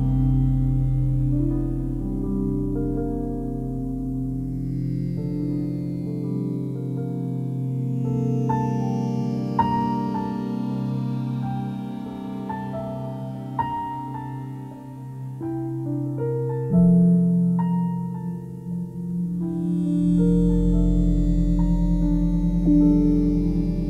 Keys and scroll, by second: 4.9 s, 17.6 s.